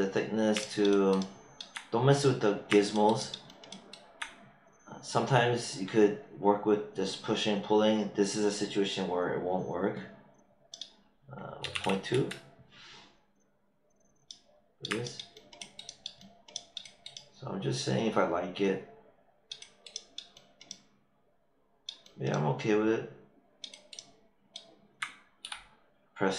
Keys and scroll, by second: 11.3-12.1 typing, 25.4 q.